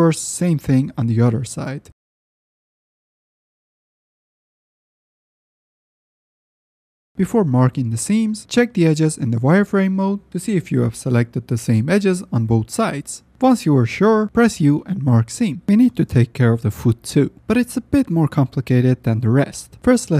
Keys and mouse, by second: 0.1 middle click, 1.0 alt+click, 1.6 ctrl+z, 2.7 shift+click, 3.0 alt+click, 4.3 shift+click, 5.6 ctrl+shift+click, 6.4 ctrl+z, 7.8 z, 8.6-9.9 middle drag, 9.9 alt+click, 10.3 alt+middle click, 11.8-13.0 middle drag, 13.0 i, 13.7 u, 15.9 F10, 16.2 middle click, 17.2 alt+middle click, 17.9 middle click, 18.7 shift+middle click, 19.9 middle click.